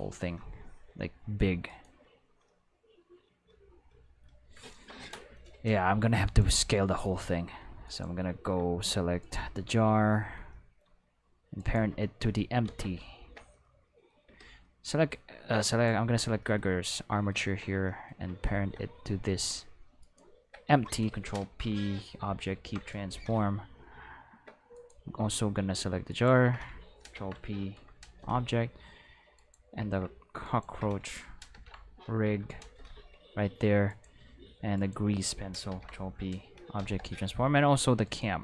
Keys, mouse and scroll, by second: 0.7-1.4 middle drag, 1.7 right click, 2.5-4.3 middle drag, 4.5 middle drag, 4.7 shift+middle drag, 5.0 middle drag, 11.6 shift+right click, 12.7 ctrl+z, 13.4-14.1 middle drag, 14.3 a, 14.6-15.3 middle drag, 15.7 right click, 20.0 shift+right click, 21.4 ctrl+p, 22.5 Return, 24.7 right click, 26.1 shift+right click, 27.1 ctrl+p, 27.7 Return, 29.3 right click, 30.4 shift+right click, 31.5 ctrl+p, 32.2 Return, 33.9 right click, 34.7 shift+right click, 35.7 ctrl+p, 35.9 Return, 38.0 right click.